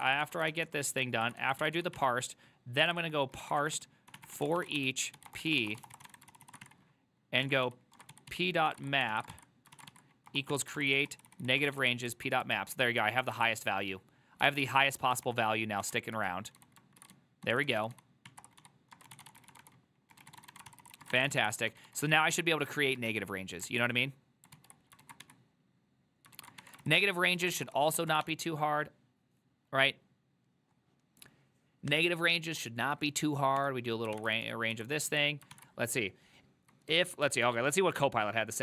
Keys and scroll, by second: 0.0-12.3 typing, 1.1 ctrl+d, 9.8 ctrl+c, 12.4 ctrl+u, 12.5 ctrl+u, 12.8 ctrl+u, 13.4 ctrl+u, 15.3 ctrl+d, 15.9 ctrl+d, 16.0-23.7 typing, 24.7 alt+{, 25.1 ctrl+a, 25.3 ctrl+a, 26.4 ctrl+a, 26.9 ctrl+c, 27.0 ctrl+c, 27.2 ctrl+c, 27.3-28.8 typing, 34.1-38.0 typing, 35.6 ctrl+c.